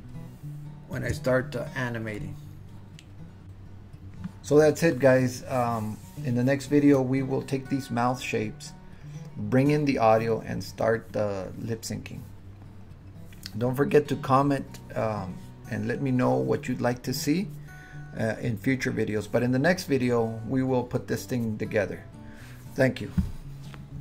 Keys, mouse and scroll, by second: 0.0-1.0 shift+middle drag.